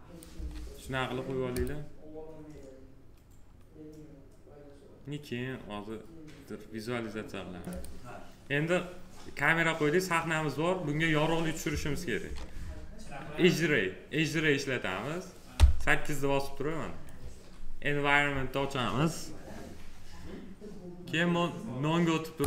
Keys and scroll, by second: 0.2 s, 15.4 8.